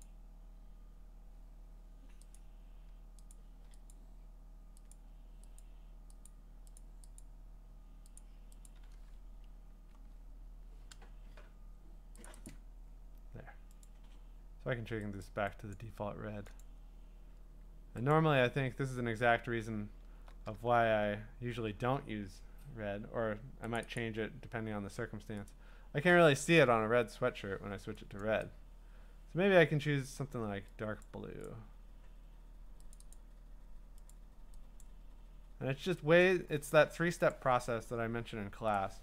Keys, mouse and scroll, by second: 0.0 click, 2.4 click, 3.3 click, 3.9 click, 4.9 click, 5.6 click, 6.3 click, 6.8 click, 7.2 click, 8.3 click, 8.7 click, 9.9 Escape, 12.3 click, 12.5 click, 13.9 click, 15.2 click, 15.7 click, 16.6 click, 18.1 click, 18.6-19.4 ctrl+scroll, 19.4 scroll up 8, 19.5-20.2 scroll down 9, 20.9 b, 22.6 scroll, 23.8 click, 24.1 click, 25.5 click, 28.2 click, 30.3 click, 31.0 click, 31.5 click, 33.0 click, 33.1 click, 34.1 click, 35.0 click, 36.2 click, 37.3 click, 38.8 click.